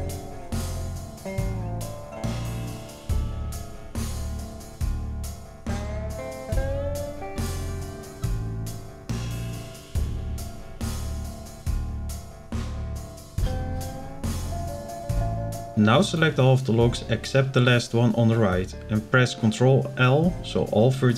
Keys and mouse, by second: 3.7 click, 4.7 ctrl+l, 6.0-7.2 drag, 7.4 click, 9.0 click, 10.3 ctrl+l, 11.8-12.8 drag, 13.1 click, 13.8 click, 15.7 b, 17.8 ctrl+l, 20.2 shift+middle click.